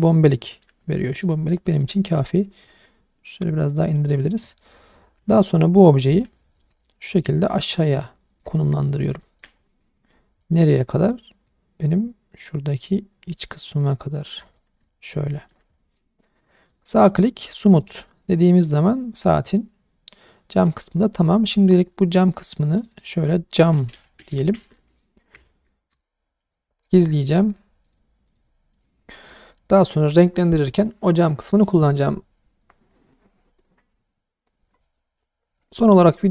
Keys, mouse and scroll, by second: 0.0-1.2 middle drag, 1.6 shift+middle click, 1.9-2.6 scroll up 1, 2.6 click, 3.9 middle click, 5.2 Tab, 6.2-6.6 middle drag, 7.2 click, 8.6-9.1 middle drag, 9.2 shift+middle drag, 9.5 scroll up 1, 9.8 middle drag, 10.1 scroll up 1, 10.4 middle click, 11.5 click, 14.6-15.5 middle drag, 15.7-16.4 scroll down 3, 16.4-16.7 middle drag, 17.0 right click, 17.8 click, 18.1-20.6 middle drag, 20.8 click, 21.9-22.8 scroll down 1, 22.8 click, 22.9-25.9 drag, 27.8 click, 28.3 click, 28.7-29.3 alt+middle drag.